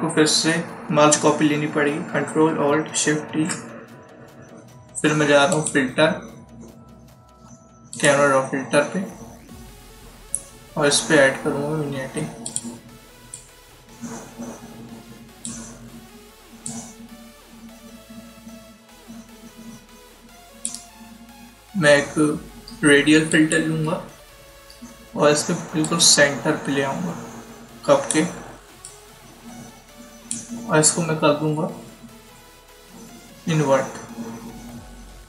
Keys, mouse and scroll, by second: 3.2 ctrl+shift+e, 5.4 click, 12.3 click, 23.2 click, 25.7 click, 33.1 scroll down 1, 34.4 scroll up 1.